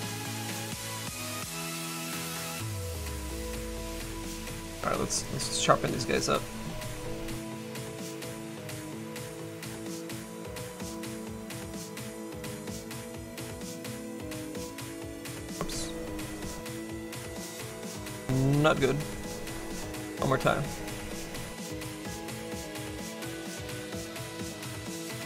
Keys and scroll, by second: 15.4 ctrl+z.